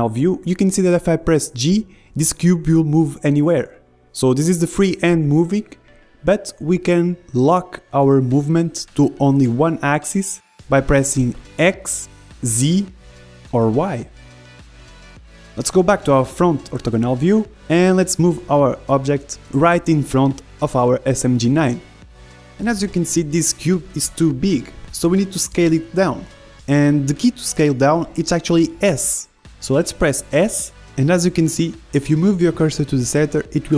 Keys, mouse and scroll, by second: 6.6 g, 10.6 g, 13.3 g, 18.7 KP_1, 19.5 click, 19.5 middle click, 20.6 g, 24.1-28.0 middle drag, 28.3 s.